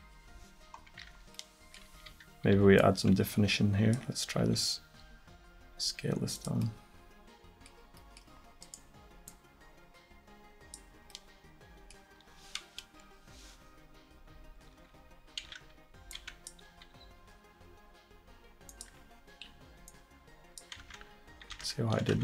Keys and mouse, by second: 0.8 middle click, 2.0 a, 2.6 b, 4.5 s, 9.3-10.8 middle drag, 10.8 click, 12.8 KP_1, 14.8 a, 16.1 b, 16.7 s, 19.9 click, 20.6 click.